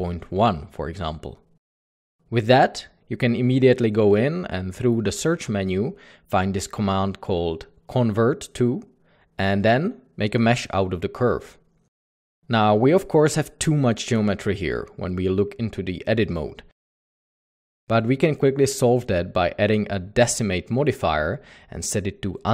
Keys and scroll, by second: 0.0 typing, 0.4 Return, 7.2 F3, 7.8-8.4 typing, 11.1-13.0 typing, 12.9 Tab, 15.8 Tab, 16.4 typing, 17.3 Tab.